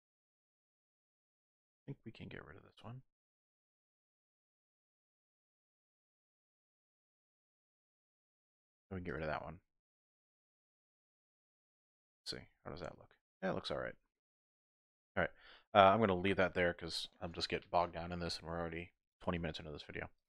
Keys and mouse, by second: 0.4 middle click, 2.2 middle click, 4.1-5.5 middle drag, 6.5 typing, 8.4 x, 9.4 middle click, 10.4 alt+click, 10.6 typing, 10.8 click, 11.7 x, 12.5 Tab, 12.9 click, 13.5 middle click, 15.3 shift+middle click, 15.9-17.0 middle drag.